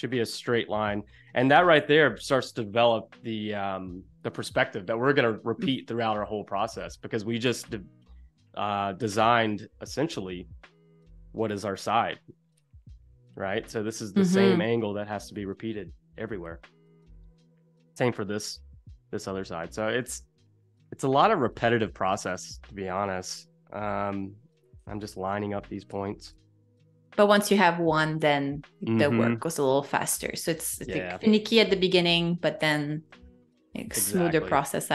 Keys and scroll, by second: 11.5 shift+super+[, 16.6 space, 18.0 z, 18.9 a, 19.4 z, 20.1 a, 24.6 space, 31.2 super+-, 32.7 space, 33.6 super+=, 34.1 space.